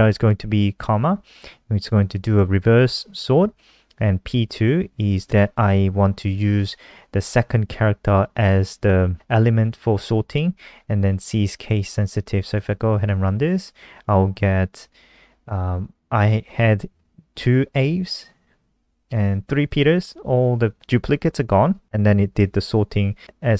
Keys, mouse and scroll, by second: 12.1 ctrl+s, 12.5 F5.